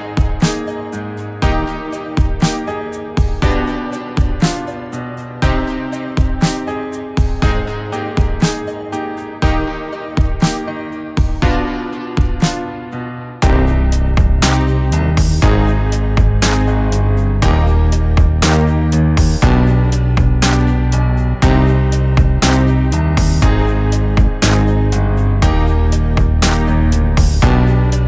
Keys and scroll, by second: 1.1 ctrl+t, 3.3 ctrl+t, 5.2 ctrl+t, 7.2 ctrl+t, 8.6 ctrl+t, 10.7 ctrl+t, 12.3 ctrl+t, 16.4-17.0 [, 17.4 [, 19.3 ], 19.8 ], 20.5 ctrl+z, 21.2 ctrl+z, 21.8 [, 22.3 [, 22.9 ], 23.3 ctrl+z, 24.1 ctrl+z, 25.1 ctrl+z, 25.2 [.